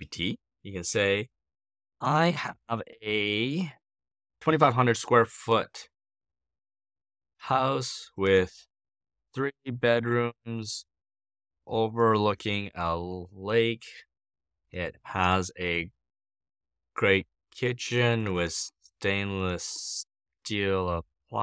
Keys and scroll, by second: 1.7-2.9 typing, 4.3-21.4 typing.